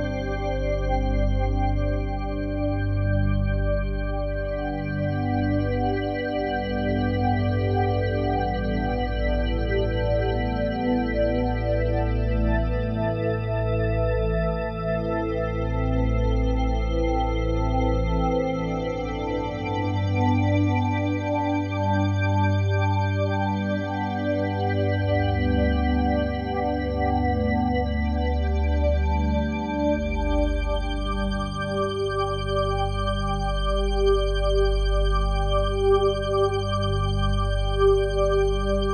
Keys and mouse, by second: 0.2 typing, 1.1 click, 1.9 typing, 3.5 click, 4.1 typing, 4.8-5.8 drag, 5.6 typing, 6.9-8.0 drag, 8.2 alt+a, 8.2 typing, 9.0-10.7 ctrl+alt+drag, 10.7 typing, 13.2-17.0 drag, 17.0 Delete, 18.6 ctrl+alt+click, 19.0 alt+shift+click, 19.9 click, 20.3 click, 21.5 click, 22.8 click, 23.1 click, 24.0 m, 25.5 click, 26.3 click, 27.1 click, 27.4 click, 28.4-28.7 typing, 29.9 click, 30.4 click, 31.0 click, 32.3 click, 34.3-35.5 drag, 35.9 click, 36.3 click, 37.1 ctrl+t, 37.1 typing.